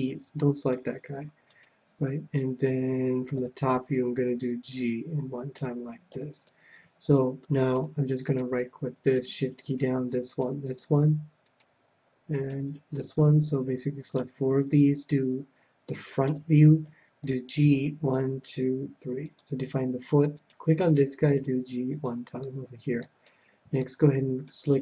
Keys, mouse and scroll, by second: 1.4-3.3 right drag, 3.3 KP_7, 4.7-6.4 drag, 6.1 a, 6.5-9.0 middle drag, 8.2-13.8 right drag, 12.9-14.5 middle drag, 16.2 KP_1, 17.2 g, 19.3-21.1 drag, 20.3-22.1 right drag, 21.3 g, 22.1-23.6 drag, 22.6-24.8 middle drag, 24.5-24.8 right drag.